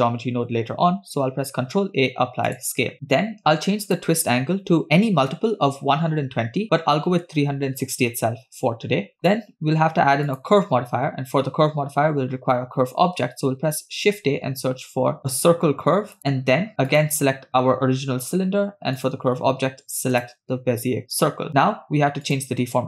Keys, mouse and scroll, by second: 1.7 ctrl+a, 4.0-8.1 drag, 9.4-12.2 drag, 14.2 shift+a, 17.2 click, 19.6 click.